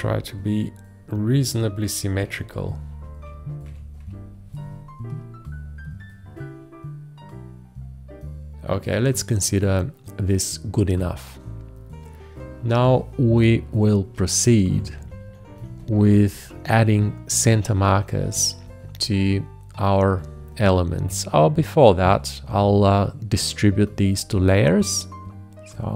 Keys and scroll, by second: 2.3 Right, 3.0 Left, 14.5 shift+Down, 15.9 Left.